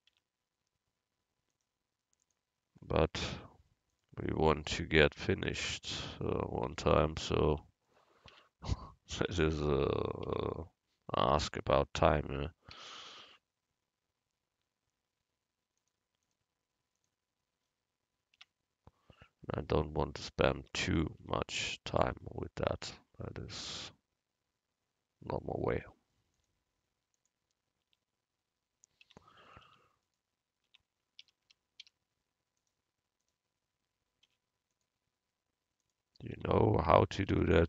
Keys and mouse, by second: 0.2 Tab, 1.6-3.3 drag, 3.3 u, 5.6 Tab, 6.2-10.0 drag, 6.7 Tab, 8.4 Tab, 9.3 Tab, 10.3 Tab, 11.6 Tab, 12.8 a, 15.8-18.2 drag, 18.5 Tab, 20.7 Tab, 21.3 Tab, 22.1 Tab, 22.9 a, 25.9 u, 27.9 Tab, 29.3 Tab, 29.7 Tab, 30.8 Tab, 31.3 a, 31.6 a, 32.7 a, 34.3 u, 36.4 Tab, 37.4 Tab.